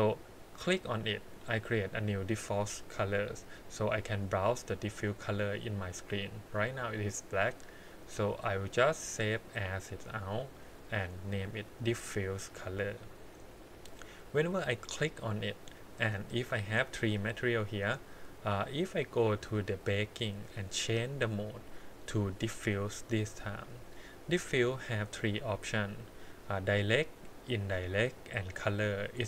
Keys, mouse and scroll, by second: 0.6 click, 2.6 scroll down 2, 3.0 middle click, 4.1-5.2 drag, 6.1 scroll up 1, 6.6-7.2 scroll down 1, 8.0-10.5 drag, 13.8 click, 14.8 click, 15.5 middle click, 16.5 click, 16.9 click, 17.1 click, 17.4 click, 18.4 click, 20.1 scroll down 2, 20.9-23.3 drag, 24.5-27.6 scroll down 4.